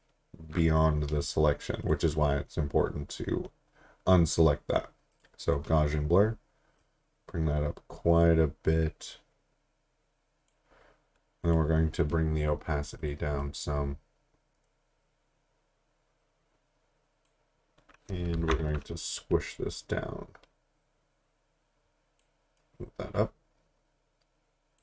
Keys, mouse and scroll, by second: 1.8 click, 5.1 click, 18.4 t, 19.5 click.